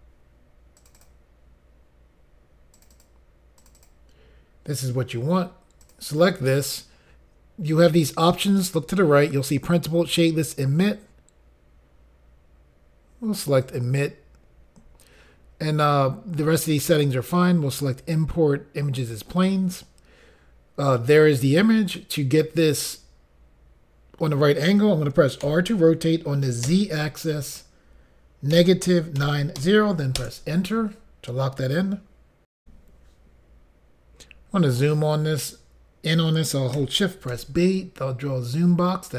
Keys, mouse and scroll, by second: 0.8 click, 0.9 click, 2.7 click, 2.9 click, 3.6 click, 3.7 click, 5.8 click, 13.6 click, 19.0 click, 26.7 z, 29.2 typing, 30.2 Return, 30.2 typing, 32.6 Insert, 37.7 click.